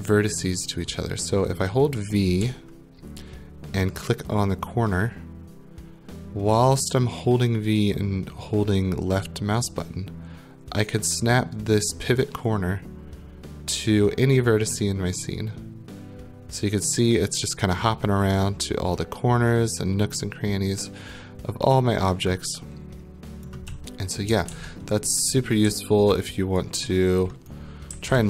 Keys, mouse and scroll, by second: 0.8 right click, 2.4-23.7 typing, 23.5 click, 24.5 ctrl+z, 25.7 w, 26.6 right click, 27.3 middle click, 27.7-28.2 typing.